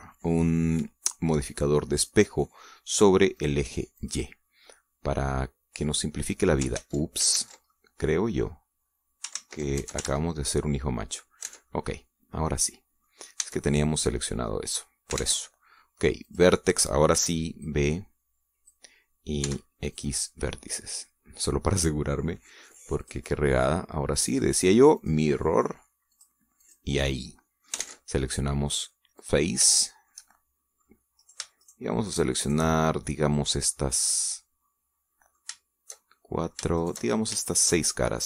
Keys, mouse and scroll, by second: 0.4 click, 4.1 click, 4.8 click, 5.4-7.5 middle drag, 7.5 ctrl+z, 8.5 ctrl+middle click, 10.1 ctrl+z, 11.4 ctrl+middle click, 12.2 Tab, 12.5-14.0 middle drag, 14.1 a, 15.9 ctrl+Tab, 17.0 click, 17.9 b, 18.4-19.7 drag, 20.2 x, 20.7 click, 21.3-23.1 middle drag, 23.8 click, 25.7 click, 26.9 click, 27.4 click, 27.9 middle click, 28.6 ctrl+Tab, 29.9 click, 30.5 shift+middle click, 31.5 middle click, 32.0 shift+right click, 32.4 shift+right click, 32.9 shift+right click, 33.4-36.3 shift+drag, 33.4-36.3 shift+middle drag, 33.4-36.3 shift+right drag, 36.9 shift+middle click, 37.6 shift+right click, 37.8 shift+click, 37.8 shift+middle click.